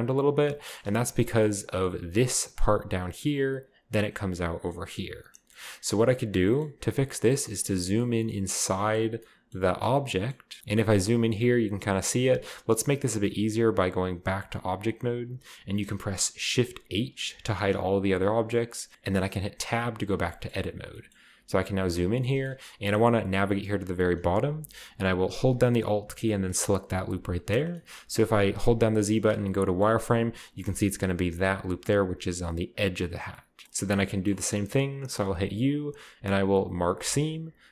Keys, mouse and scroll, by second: 0.4-1.9 middle drag, 0.6-1.7 scroll up 2, 1.7 scroll down 2, 6.7-7.0 scroll up 2, 7.7 scroll up 2, 9.0 middle click, 10.0 middle click, 10.0-12.5 scroll up 2, 10.9-14.3 shift+middle drag, 12.5-13.6 scroll down 1, 13.6-14.3 scroll down 1, 14.3 Tab, 14.3 scroll down 1, 17.2 shift+h, 18.2-18.9 middle drag, 18.9 Tab, 18.9-19.9 scroll up 1, 20.5-25.3 shift+scroll up 6, 20.8-22.0 shift+middle drag, 22.1-25.3 middle drag, 26.2 alt+right click, 27.0-27.8 scroll down 2, 27.8 scroll up 1, 28.5-29.2 z, 29.9-30.9 scroll up 1, 33.3-35.4 shift+middle drag, 34.6-35.6 scroll up 1, 35.4 u, 36.8-37.3 drag, 37.3-37.7 scroll down 1.